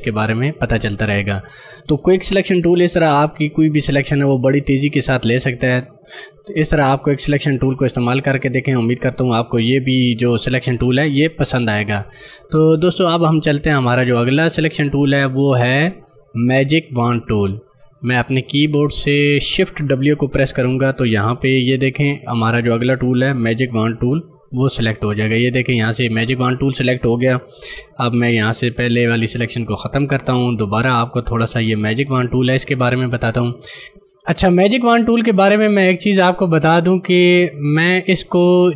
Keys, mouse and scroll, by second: 2.1 click, 7.7 space, 7.9 click, 8.1 space, 9.2 click, 15.4 right click, 18.2 click, 22.5 click, 24.4 shift+w, 29.4 ctrl+d, 30.7 click, 31.1 right click, 31.5 click.